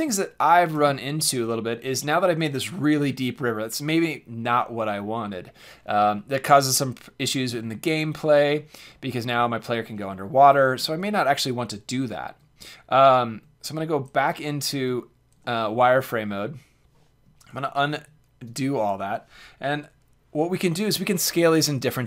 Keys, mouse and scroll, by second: 7.3 middle click, 9.3-12.0 middle drag, 12.3 Tab, 13.3 Tab, 14.7 z, 15.4-16.5 middle drag, 17.5 ctrl+z, 17.9 ctrl+z.